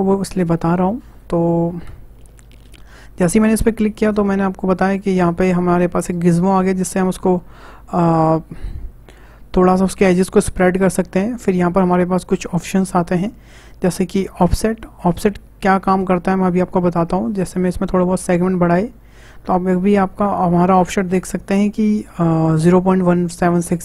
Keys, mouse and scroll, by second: 0.4-1.9 drag, 1.9 a, 3.3-6.5 drag, 8.1-11.2 middle drag, 17.9-20.9 drag.